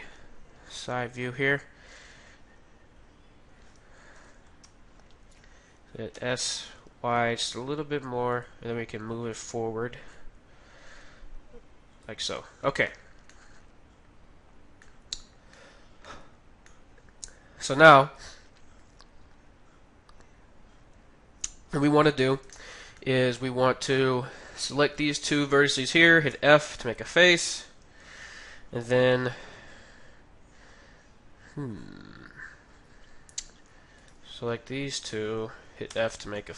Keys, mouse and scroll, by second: 6.1 s, 10.2-11.8 drag, 12.4-15.0 middle drag, 14.9-16.5 drag, 15.5 middle click, 16.7-18.5 middle drag, 22.5-24.6 middle drag, 23.9-26.8 right drag, 26.3 f, 26.8-31.0 middle drag, 34.0-36.5 right drag, 35.8 f, 36.3-36.5 middle drag.